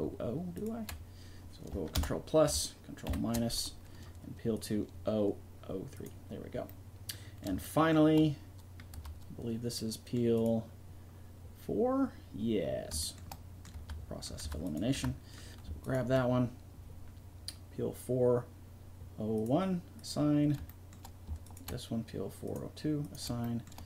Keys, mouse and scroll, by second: 0.5-2.7 drag, 1.9 ctrl+KP_Add, 3.0 ctrl+KP_Subtract, 7.4 middle click, 8.2-9.5 drag, 8.9 Tab, 10.3-12.0 right drag, 13.7 Tab, 14.4 Tab, 14.6 right click, 14.9 Tab, 21.4 middle click, 22.4 middle click, 23.4 middle click.